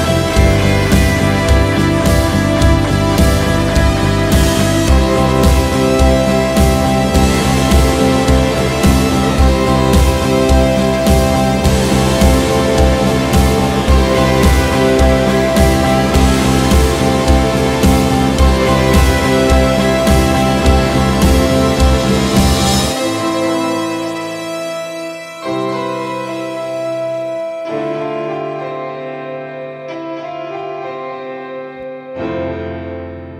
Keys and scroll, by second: 0.9 ctrl+n, 2.4 ctrl+n, 2.5 ctrl+e, 2.7 ctrl+w, 2.9 ctrl+space, 7.2 ctrl+shift+n, 11.0-13.6 typing, 16.9 ctrl+shift+w, 20.6-21.6 typing, 22.0 ctrl+s, 26.3-27.4 typing, 28.4-29.5 typing, 29.6 shift+Return, 31.9 ctrl+shift+s, 33.0-33.3 typing.